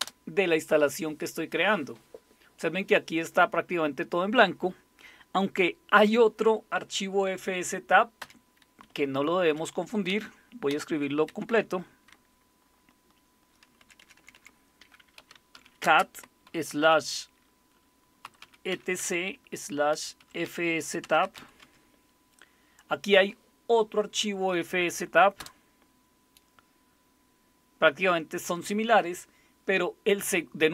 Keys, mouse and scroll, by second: 0.0 Return, 8.2 Up, 8.9 Left, 9.4 Left, 9.4 Left, 10.1 Down, 10.7 Down, 11.3 Right, 11.5 Right, 12.1 BackSpace, 12.6 BackSpace, 12.7-13.4 BackSpace, 13.8 Delete, 14.0 Delete, 14.2 Delete, 14.3 Delete, 14.9-16.5 typing, 18.0-21.3 typing, 21.2 Delete, 21.6 Tab, 25.4 Return.